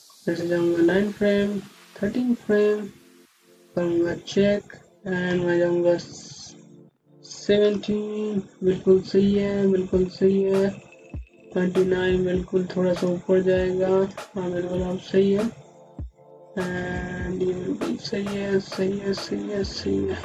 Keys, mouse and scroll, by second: 5.0 click, 9.2-11.1 typing, 12.9 click, 14.3-15.2 typing.